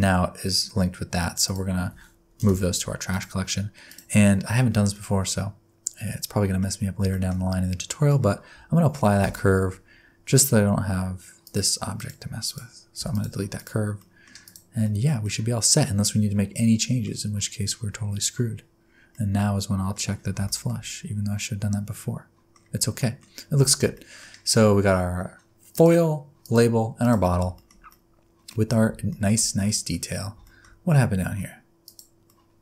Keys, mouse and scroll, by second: 1.4 shift+click, 2.3 m, 3.8 click, 4.9 middle click, 6.7 scroll up 1, 7.1 shift+middle click, 7.5 middle click, 9.2 ctrl+a, 11.4 click, 11.9 click, 12.4 click, 13.0 x, 13.5 click, 14.0 middle click, 14.4 click, 14.8 middle click, 15.2 middle click, 17.0-19.0 scroll up 20, 19.0 scroll down 1, 19.1 middle click, 20.0-20.3 scroll down 4, 20.4 shift+middle click, 20.8 middle click, 22.6-23.5 scroll down 4, 23.0 middle click, 23.6 shift+middle click, 23.9 middle click, 25.7 click, 26.4 click, 27.0 click, 27.5 shift+middle click, 27.8 scroll down 1, 27.9 middle click, 29.1 shift+middle click, 29.6 middle click, 30.4 shift+middle click, 31.0-31.8 scroll up 2, 31.8 click, 32.2 middle click.